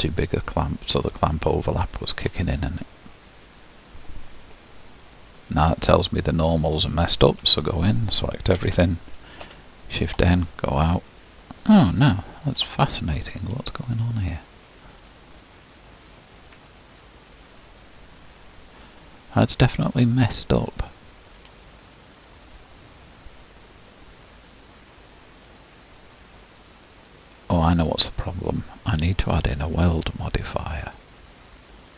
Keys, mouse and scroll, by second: 0.5-6.4 shift+drag, 6.4-7.5 middle drag, 6.4-7.5 scroll down 1, 7.5 Tab, 8.5 a, 9.5 shift+n, 10.3 Tab, 11.9 shift+middle click, 12.9-14.1 scroll down 2, 14.1-15.3 scroll up 3, 16.1-17.7 scroll up 1, 17.7-19.2 drag, 19.2-21.8 middle drag, 21.8-22.5 scroll down 1, 22.5-23.2 scroll down 4.